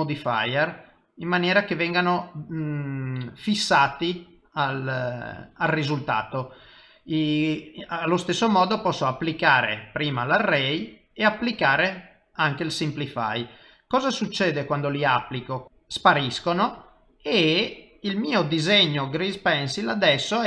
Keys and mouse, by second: 1.0 click, 4.0 typing, 5.3 click, 9.0 click, 11.0 click, 14.2 middle click, 15.6 click, 16.4 middle click, 17.7 middle click.